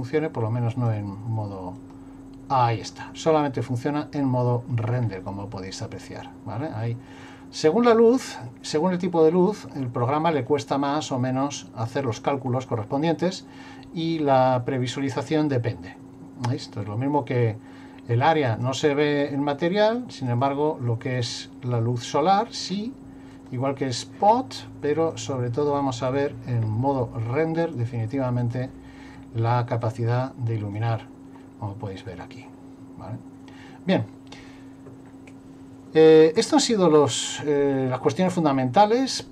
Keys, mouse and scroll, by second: 0.7 click, 3.3 middle click, 4.7 middle click, 5.8 click, 9.7 middle click, 11.3 scroll up 2, 15.2 click, 20.3 click, 25.1 click, 27.6 click, 29.9 click, 31.4 middle click, 37.7 middle click.